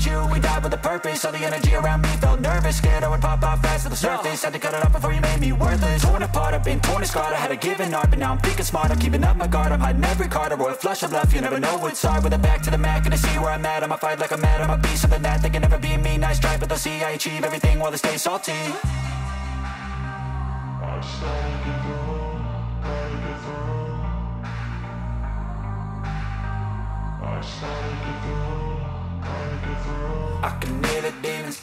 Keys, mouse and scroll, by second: 0.9 right click, 1.9 click, 3.1 click, 13.4 click, 15.5 click, 17.1 click, 17.5 click, 19.0 click, 19.7 click, 20.6 click, 21.5 click, 22.5 click, 23.3 click, 23.9 click, 28.1 click, 29.1 click, 29.2 click, 29.8 click, 30.7 click.